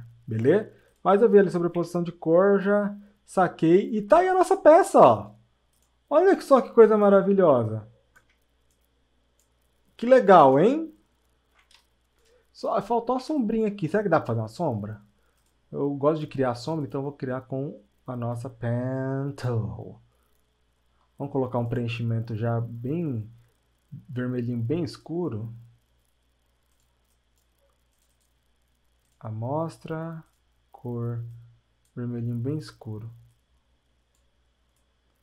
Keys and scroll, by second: 12.6 ctrl+alt+space, 13.3 ctrl+alt+space.